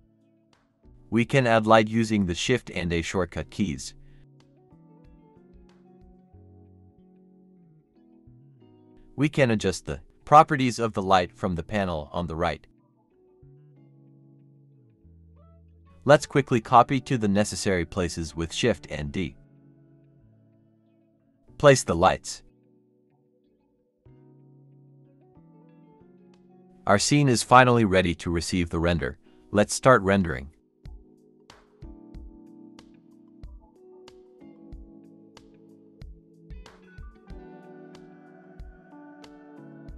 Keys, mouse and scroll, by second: 4.2 Escape, 4.5 a, 5.2 shift+a, 10.3-11.1 typing, 13.0-13.8 typing, 13.0 Return, 14.0 Return, 14.9 typing, 16.2-16.5 scroll up 1, 17.0 typing, 19.2-20.4 typing, 20.8-21.1 scroll down 1, 21.5-23.2 typing, 22.0 Escape, 24.3-25.3 typing, 26.9-28.0 typing, 28.0 Return, 28.6 scroll down 1.